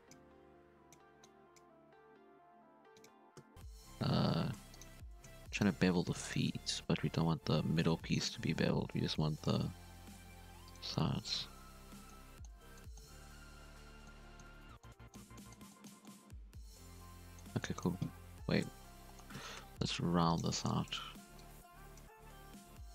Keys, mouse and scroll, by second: 0.1 g, 1.2 click, 1.7 g, 3.1 z, 3.3 Tab, 3.4 scroll down 2, 3.5 shift+right click, 3.7 3, 4.0 1, 4.4 alt+a, 4.7 alt+shift+right click, 5.5 alt+shift+right click, 5.9 2, 6.2 shift+right click, 7.0 ctrl+v, 9.1 ctrl+b, 10.8 Tab, 10.9 scroll down 2, 10.9-11.4 middle drag, 11.4 alt+a, 11.5 scroll down 1, 11.6-12.1 middle drag, 12.1 scroll down 3, 12.2-13.2 middle drag, 13.2 ctrl+z, 14.0-18.4 middle drag, 18.4 KP_7, 18.6 Tab, 19.0 shift+middle drag, 19.1 scroll up 1, 19.3 z, 19.6 1, 19.8 drag, 20.6 drag, 21.3 click, 22.1 z, 22.4 g.